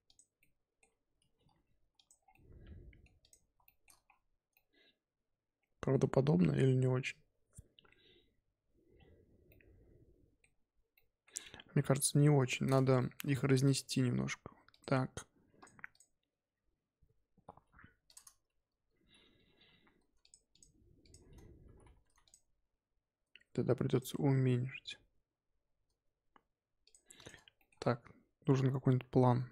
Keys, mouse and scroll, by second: 0.4-1.3 middle drag, 1.3 g, 2.2 scroll down 1, 2.3-3.2 middle drag, 3.2 click, 3.6-4.0 shift+middle drag, 4.0-4.5 scroll up 1, 4.5-5.9 middle drag, 5.9 scroll up 2, 8.9-9.4 scroll down 3, 9.4-10.5 middle drag, 10.5-10.9 scroll up 2, 10.9-12.1 middle drag, 12.1 KP_1, 12.9 shift+middle drag, 13.2-13.6 scroll up 3, 13.6 click, 13.9 g, 15.5 click, 15.9 click, 17.4 g, 20.2 shift+click, 20.5 shift+click, 21.0 shift+click, 21.6 g, 22.6 s, 24.1 g, 27.1 click, 27.5-29.5 shift+middle drag.